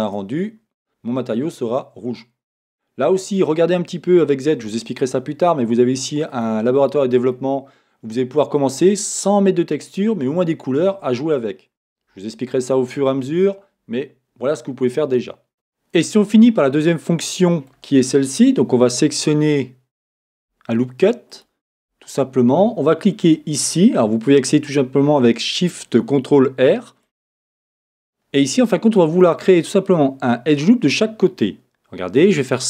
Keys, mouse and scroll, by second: 4.4 z, 14.7-15.1 scroll down 1, 21.4 alt+shift+click, 27.9-32.5 middle drag, 32.5 click.